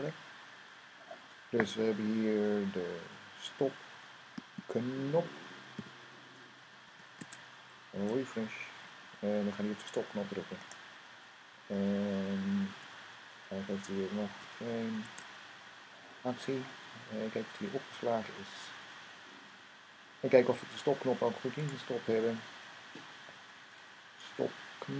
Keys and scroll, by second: 5.5 n, 6.7 super+s, 7.8 super+r, 14.1 super+r.